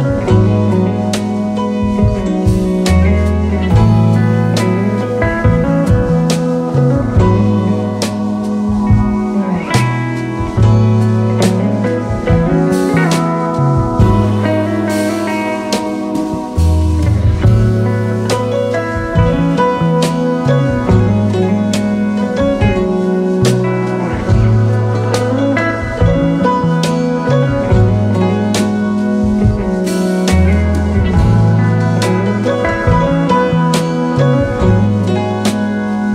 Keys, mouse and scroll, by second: 0.0 double click, 0.7 alt+right click, 1.0 alt+right click, 1.3 alt+right click, 3.2 alt+right click, 3.8 shift+click, 4.9 alt+click, 6.3 alt+scroll down 1, 7.2 alt+scroll down 2, 8.2 alt+scroll down 1, 8.8-9.8 space, 10.3 alt+scroll up 2, 12.9 alt+scroll down 4, 13.4 space, 13.5 double click, 16.1 Up, 17.2 alt+scroll up 1, 18.7 alt+scroll up 2, 18.7 shift+click, 19.5 Down, 20.7 alt+scroll down 3, 21.7-22.2 alt+scroll down 1, 22.2-22.6 space, 23.3 alt+scroll up 1, 24.2 space, 24.2 space, 24.6 alt+scroll up 1, 25.6 alt+scroll up 1, 26.2 space, 26.3 space, 32.2-32.9 typing, 34.9-35.7 typing.